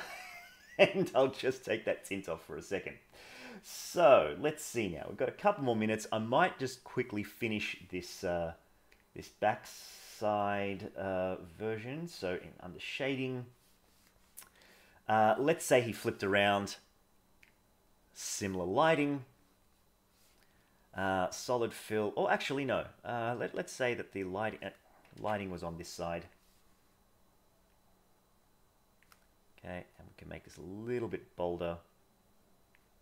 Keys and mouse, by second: 6.3-6.8 middle drag, 12.8 click, 17.5 click, 19.3 middle click, 23.6 click, 25.1 ctrl+z, 27.7-29.0 drag, 29.8 click, 31.2-32.7 drag.